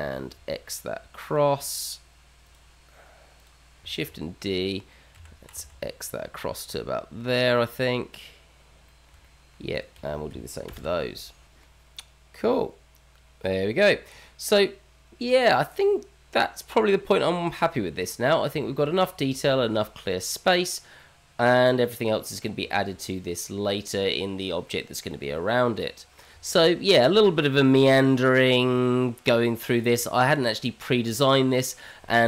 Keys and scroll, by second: 4.0 shift+d, 11.0 ctrl+KP_Subtract, 11.6 shift+z, 12.4 shift+z, 16.3 alt+x, 20.0 h, 20.5 h.